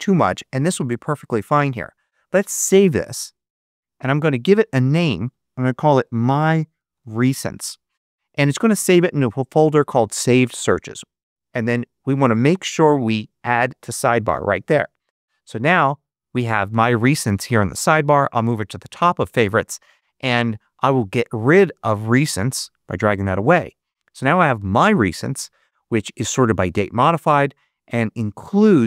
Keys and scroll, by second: 5.6-7.7 typing.